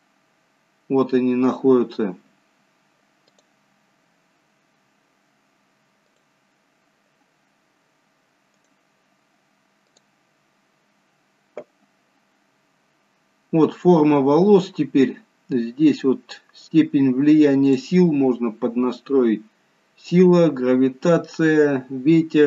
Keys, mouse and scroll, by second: 0.3 scroll down 1, 2.1-3.5 scroll down 1, 15.5-18.0 scroll down 2, 18.0 click, 18.8 scroll down 3, 20.6-21.0 scroll down 1.